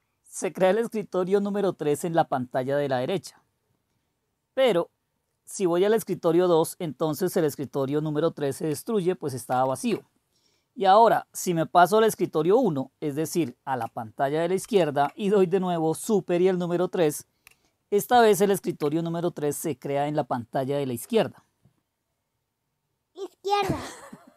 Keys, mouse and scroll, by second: 9.4 super+2, 14.6 super+1, 18.2 super+3.